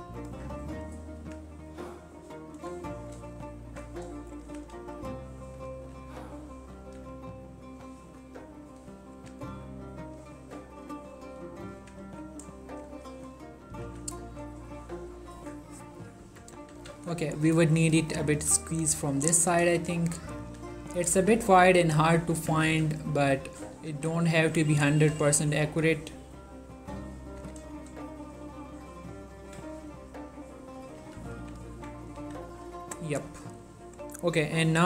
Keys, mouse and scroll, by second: 0.2 click, 1.2-1.7 scroll down 4, 1.3 g, 1.7-2.6 scroll up 2, 2.6 click, 3.0 shift+middle click, 4.4 click, 4.6 g, 4.8 x, 5.2-5.8 scroll up 1, 5.8 t, 6.9 y, 8.3 click, 9.2 g, 9.5 y, 10.4-10.9 scroll up 1, 10.9 click, 11.9 g, 12.1 y, 12.7 click, 13.2 shift+middle click, 14.0 z, 16.8 z, 17.8 click, 18.1 g, 18.4 y, 19.3 scroll down 1, 19.7 click, 20.7 g, 21.1 click, 21.2 z, 22.5 z, 22.8 s, 23.7 click, 23.9 g, 24.3 click, 24.9 z, 26.2-27.5 ctrl+middle drag, 27.5 z, 27.8-30.0 shift+middle drag, 31.1 z, 31.5 1, 31.9 Tab, 32.3 ctrl+a, 32.6 click.